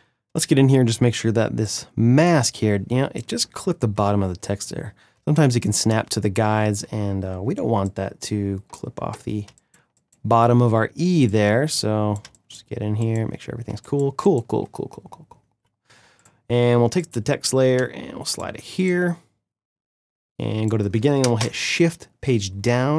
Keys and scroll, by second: 4.9 space, 9.2 space, 11.9 space, 21.1 shift+Page_Down.